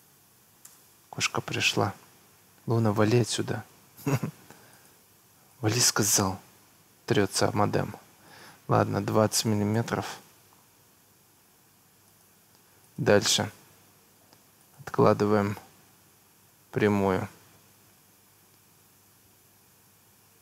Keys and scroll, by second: 0.7 Return, 3.1 Escape, 9.3 2, 9.6 0, 9.8 Return, 10.9 Escape.